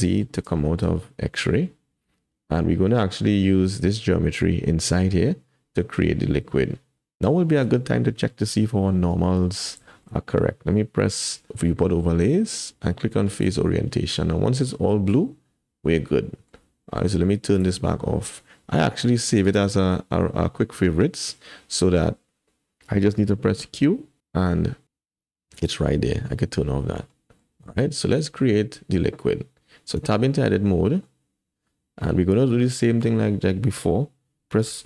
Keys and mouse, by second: 0.1 click, 0.6 shift+click, 2.0 Tab, 7.4 shift+click, 8.3 click, 9.1 Tab, 9.4 click, 9.9 shift+click, 10.2 click, 11.5-14.0 drag, 14.3-15.8 middle drag, 15.8-16.5 drag, 17.6-22.2 drag, 23.5 q, 27.1 click, 30.0 Tab, 31.1 middle click, 31.8-33.0 drag, 34.6 3.